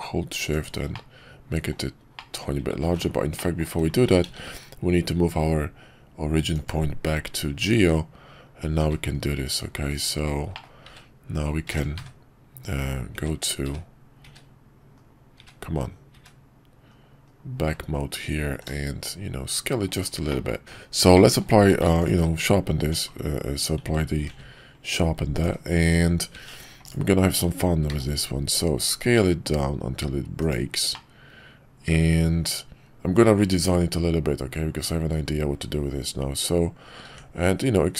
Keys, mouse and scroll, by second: 0.9-1.7 middle drag, 2.2 middle drag, 2.8 ctrl+z, 3.3 middle click, 4.2 shift+s, 10.5 middle click, 12.6 KP_5, 13.1 `, 13.6 `, 14.9 KP_5, 15.3 `, 16.1 `, 16.9 KP_5, 18.5 s, 20.3 middle click, 21.1 middle click, 21.6 q, 22.8 Tab, 24.3 ctrl+r, 26.5 Tab, 27.9 s, 31.0-34.9 middle drag.